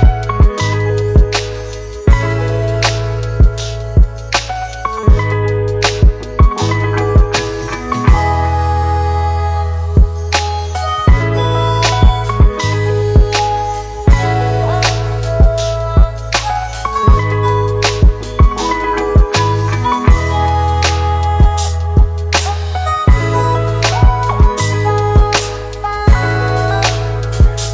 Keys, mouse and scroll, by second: 22.6-24.5 typing.